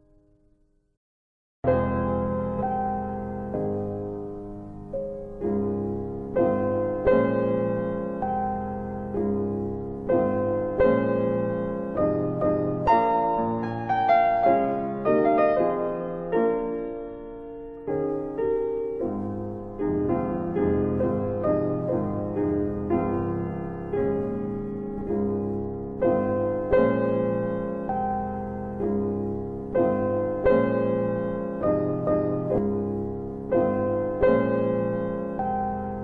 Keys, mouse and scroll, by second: 2.1 click, 3.4 alt+middle click, 3.7 alt+click, 4.5 alt+click, 4.9 scroll down 1, 11.2 click, 14.5 click, 15.0 click, 24.3 click, 28.2 right click, 31.4 click.